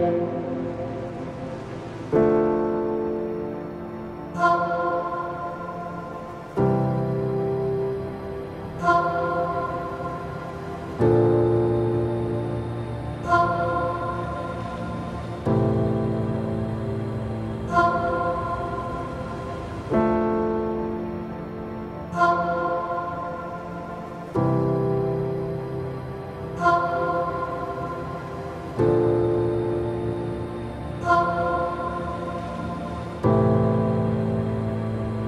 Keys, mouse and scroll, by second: 0.3 e, 4.0 click, 4.7 middle click, 5.5-5.9 scroll up 2, 6.9 alt+click, 8.2 click, 13.7 click, 14.7-15.9 scroll down 2, 15.9 ctrl+r, 19.7-21.2 shift+middle drag, 21.2 ctrl+r, 25.9-27.6 drag, 27.6 scroll down 2, 28.1-32.7 middle drag, 32.7 click, 34.5 click.